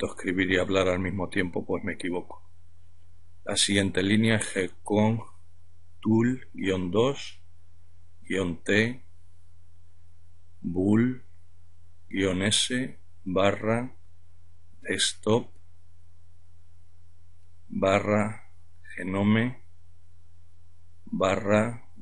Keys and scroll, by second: 0.0-1.4 typing, 3.6-4.2 typing, 6.0-9.0 typing, 10.6-15.1 typing, 16.3-18.4 typing, 19.8-21.5 typing.